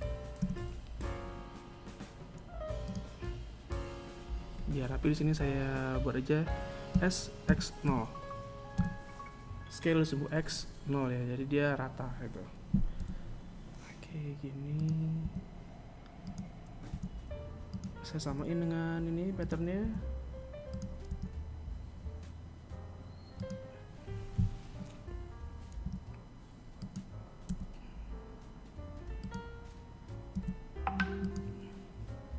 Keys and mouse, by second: 5.1 s, 11.2 g, 13.5 s, 15.1 r, 16.5 g, 18.0 s, 19.3 r, 24.0 r, 25.7 g, 30.1 s, 31.8 KP_1.